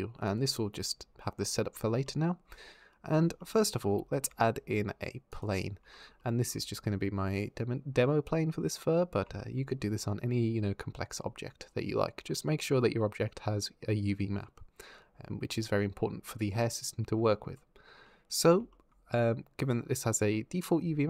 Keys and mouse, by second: 3.9 shift+a, 9.2 shift+click.